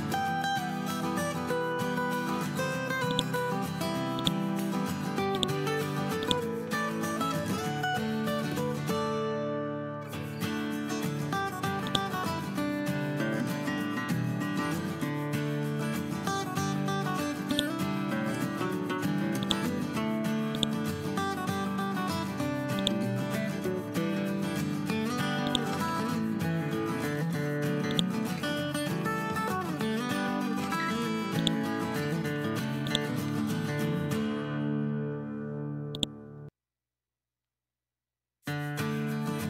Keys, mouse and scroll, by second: 0.8-2.6 scroll down 2, 3.0-6.7 drag, 6.9 ctrl+z, 7.9 scroll down 1, 8.9-10.7 scroll up 2, 11.8-15.9 drag, 27.0 scroll up 1, 27.8 click, 28.7 scroll down 1, 30.3 scroll up 1, 30.9 scroll up 1, 31.3-31.9 drag, 33.4 scroll down 1, 34.5-35.9 scroll up 1, 35.9-36.5 drag, 37.2 scroll down 1, 37.9 scroll up 1.